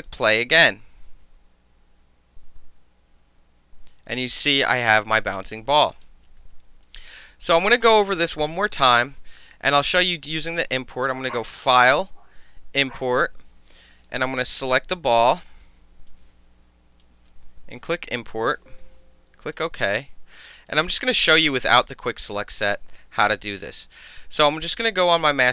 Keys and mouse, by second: 5.9 click, 6.8 click, 11.4 click, 13.0 click, 15.2 click, 16.1 click, 18.1 click, 19.6 click, 20.7 click, 21.3 click, 21.9 w, 22.3-23.0 drag.